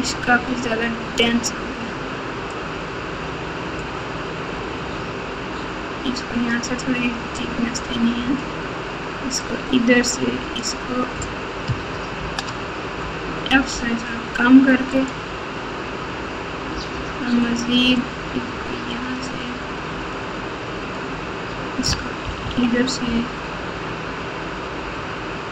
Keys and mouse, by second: 1.2-2.5 drag, 3.8-6.5 drag, 7.3-8.7 drag, 9.4-10.6 drag, 12.1 ctrl+z, 13.4 f, 16.7 f, 17.9 click, 20.1 click, 22.4 KP_2.